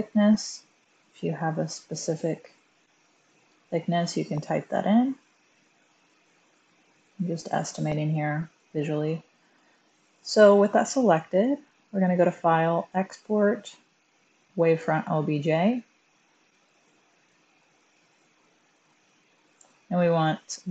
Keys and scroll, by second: 2.5 typing.